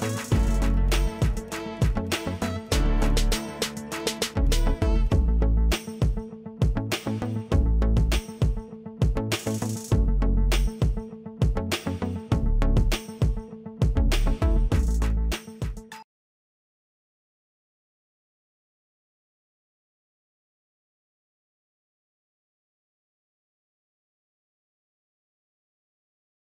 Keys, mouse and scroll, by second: 6.7 ctrl+click, 10.3 click, 11.8-12.2 scroll up 1.